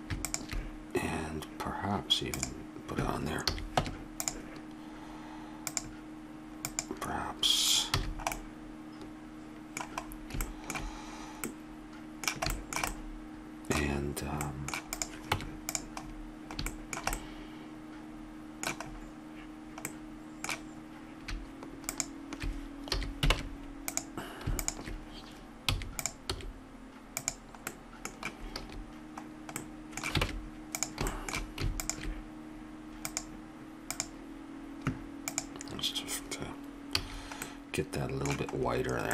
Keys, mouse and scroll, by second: 0.2 click, 3.4 a, 3.8 Tab, 8.0 a, 14.9-16.7 right drag, 15.3 Tab, 21.9-23.3 drag, 23.0 a, 23.3 ctrl+Tab, 25.6 e, 26.3 s, 28.6 a, 30.3 ctrl+Tab, 33.6-37.1 drag, 37.0 a.